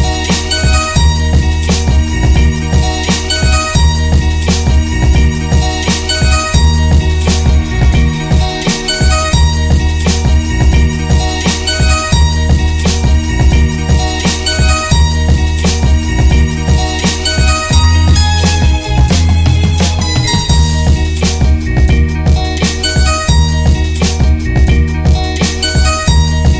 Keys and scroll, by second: 2.1 Left, 3.6 Left, 5.8 Return, 8.2 Down, 11.4-12.3 typing, 12.4 alt+f, 15.0 Left, 15.2 Left, 17.4 Return, 19.1 ctrl+g, 20.8 Tab, 20.9 Tab, 21.3 Tab, 22.2 Return, 25.4 Left, 26.2 Left.